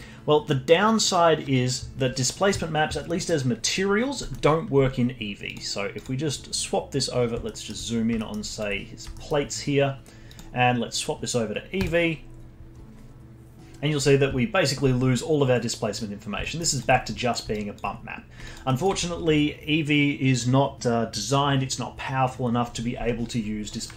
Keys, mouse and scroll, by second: 3.0-4.7 middle drag, 4.7-5.4 scroll up 12, 5.4 click, 5.9 click, 6.2-8.2 scroll up 12, 7.4 alt+middle click, 8.2 alt+middle click, 8.5 alt+click, 8.7 scroll up 2, 9.1-10.3 alt+middle drag, 10.3-13.5 drag, 15.7-16.4 scroll down 5, 16.4 alt+middle drag, 16.7-17.9 alt+drag, 17.9 scroll down 2, 18.4 alt+click, 18.6-21.7 alt+middle drag, 23.7-23.9 middle drag.